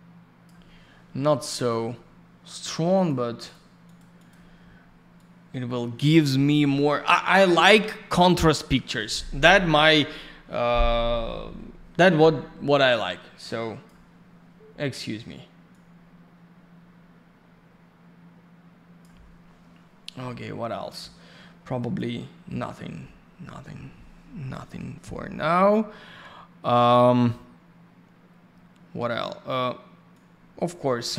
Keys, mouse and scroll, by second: 3.0 click, 3.1 click, 3.4 click, 3.5 double click, 3.8 click, 4.0 click, 4.2 click, 4.3 double click, 5.2 click, 13.0 click, 15.7 click, 21.8 click, 21.9 click, 30.1 click.